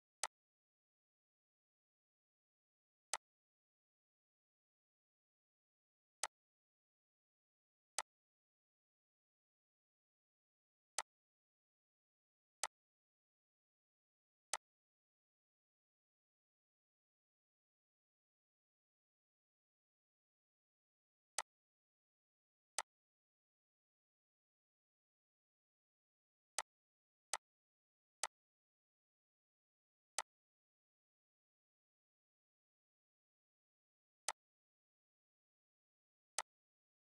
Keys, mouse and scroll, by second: 6.2-26.5 drag, 29.1-30.1 scroll up 2, 30.1 click, 34.3-37.1 drag.